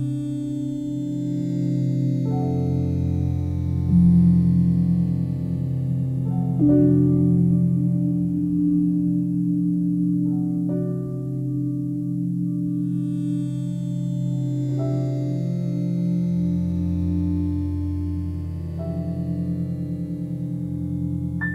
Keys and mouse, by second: 0.1 click, 0.5 shift+click, 0.9 shift+click, 1.3 shift+click, 2.4 typing, 6.7 e, 12.3 click, 12.7 alt+click, 14.3 s, 14.8 Escape, 15.7-17.8 drag, 17.6 s, 18.6-21.5 drag.